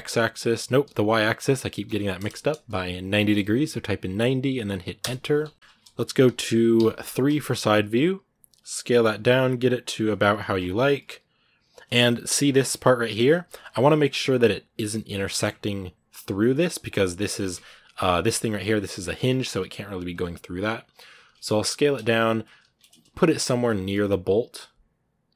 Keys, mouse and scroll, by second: 5.2-5.5 scroll up 2, 5.5 middle click, 6.0 KP_1, 7.4 scroll up 3, 8.2 s, 12.2 scroll down 1, 12.5 Tab, 12.8 right click, 13.0 g, 13.7 scroll up 3, 15.1 shift+middle click, 15.2 shift+scroll up 3, 16.0 right click, 16.2 g.